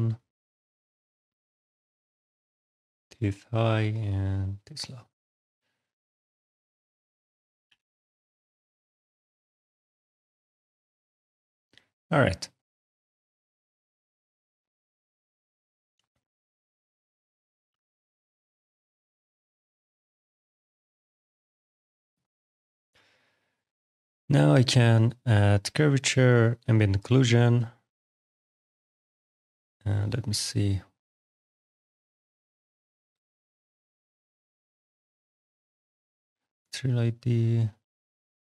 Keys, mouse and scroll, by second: 1.3 click, 2.2 click, 5.5 click, 6.9 click, 7.5 t, 7.6 e, 8.2 t, 8.2 h, 8.7 Return, 9.2 click, 10.4 click, 11.0 click, 11.6 alt+click, 11.9 right click, 12.4 middle click, 12.7 click, 13.1 middle click, 14.9 click, 16.5 click, 16.9 alt+click, 17.4 alt+middle click, 17.8 alt+right click, 22.0 click, 23.0 click, 25.4 click, 26.4 click, 29.7 click, 31.1 click.